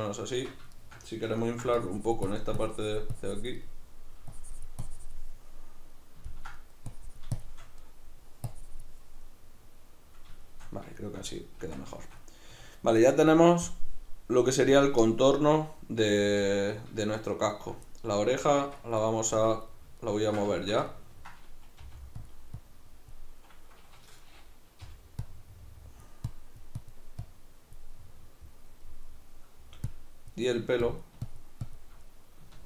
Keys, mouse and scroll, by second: 0.3 Tab, 1.8-3.6 drag, 3.6 middle click, 4.3-5.3 drag, 5.3-6.9 middle drag, 6.9 click, 7.8 middle click, 8.5 click, 9.2-13.7 middle drag, 11.6 Tab, 12.5 a, 13.7-15.3 drag, 15.3-19.0 middle drag, 18.6 Tab, 19.0-19.3 right drag, 19.3 Tab, 19.7-22.3 ctrl+middle drag, 21.8 f, 22.3 click, 24.9-27.9 drag, 24.9 g, 27.9-29.9 middle drag, 29.9-32.1 drag, 32.1-32.6 middle drag.